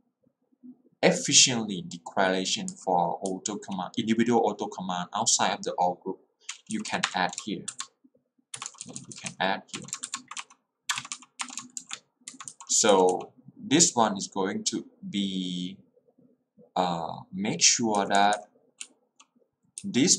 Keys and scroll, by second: 3.4 h, 6.8 l, 7.2 i, 8.4-9.8 typing, 11.0-13.0 typing, 18.0 k, 18.9 h.